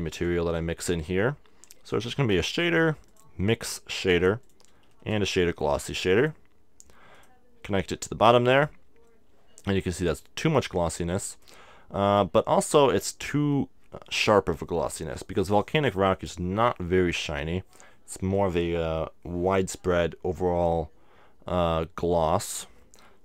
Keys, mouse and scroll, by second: 0.0 shift+a, 4.5-6.4 drag, 4.9 shift+a, 7.2-9.6 drag, 11.3-13.2 drag.